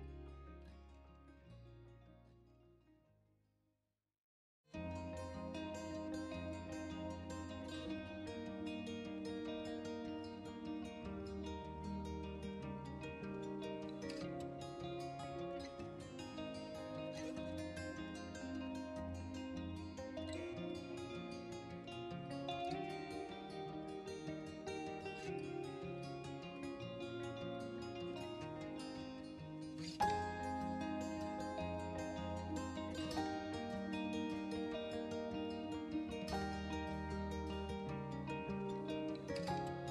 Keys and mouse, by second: 0.8 KP_1, 0.9 KP_3, 1.3-1.8 middle drag, 2.2-2.7 middle drag, 3.1 shift+z, 3.8 middle click, 4.6 g, 4.8 shift+z, 5.4-5.8 middle drag, 5.9-6.4 middle drag, 6.6 middle click, 6.8 middle drag, 7.1-7.7 middle drag, 7.9 KP_1, 8.2-9.1 middle drag, 10.4-11.3 middle drag, 11.7 middle drag, 12.5-12.9 middle drag, 13.3 shift+d, 13.6 shift+z, 14.2 right click, 14.4 r, 14.4 z, 15.2 middle click, 15.8 middle click, 16.1 z, 17.9 middle drag, 18.3 r, 18.4 z, 19.1 drag, 19.2-19.8 middle drag, 19.9-20.2 middle drag, 20.5 middle click, 21.1 middle click, 22.2 shift+d, 22.5 shift+z, 23.0 right click, 23.2 middle click, 23.5 r, 23.6 y, 24.2 right click, 24.4 middle click, 24.8 z, 25.4 middle click, 25.6 s, 25.8 x, 26.6-27.4 middle drag, 27.6 middle click, 27.7 r, 27.8 z, 28.8 middle drag, 29.3-30.1 middle drag, 30.3 KP_1, 30.9 KP_3, 31.2 middle drag, 31.8 middle click, 32.0 KP_1, 33.5 s, 34.0 middle click, 34.4 KP_1, 35.0-35.9 middle drag, 36.0 r, 36.2 z, 36.5 middle click, 37.0 middle drag, 37.3 click, 37.6 right click, 37.8 g, 38.0 shift+z, 38.4 drag, 38.5 middle click, 38.8 KP_1, 39.1 KP_3.